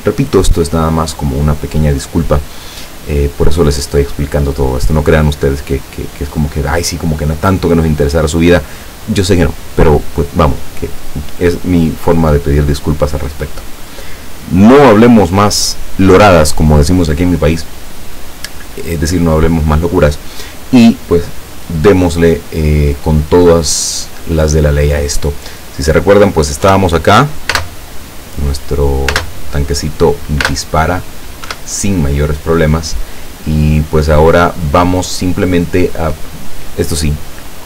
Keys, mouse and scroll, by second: 23.5-24.5 middle drag, 24.5 right click, 26.7 p, 27.6 space, 29.2 space, 30.5 space, 31.5 Escape, 33.3-35.7 middle drag.